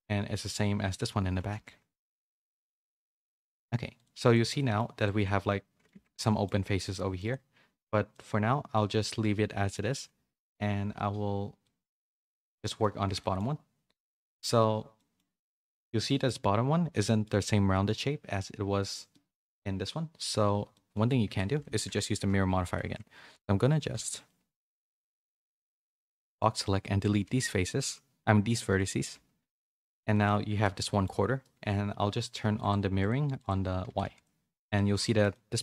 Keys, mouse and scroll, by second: 2.1 a, 2.3 a, 2.4-3.6 middle drag, 3.9 click, 4.5 middle click, 5.2 middle click, 5.9 Tab, 6.2 middle click, 6.8 2, 7.1 alt+click, 8.1 middle click, 9.0 middle click, 11.7 middle click, 12.6 shift+middle click, 13.0 Tab, 13.2 middle click, 14.2 middle click, 14.9 middle click, 16.1 middle click, 16.9 middle click, 19.1 middle click, 20.7 middle click, 21.2 Tab, 21.5-23.4 typing, 25.0 a, 25.2 a, 25.4 b, 27.2 x, 29.4 middle click, 30.1 shift+middle click, 30.5 Tab, 30.7 middle click, 32.9 click, 34.0 a, 34.2 middle click, 34.9 a, 35.0 middle click, 35.3-35.6 middle drag.